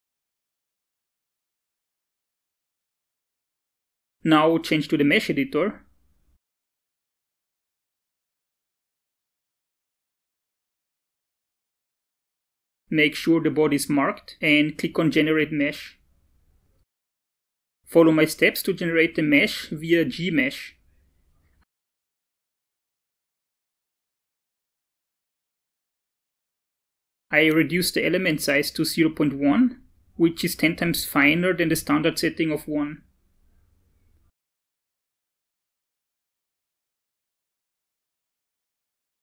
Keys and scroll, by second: 27.0 BackSpace, 27.5 0, 28.1 ., 28.7 1.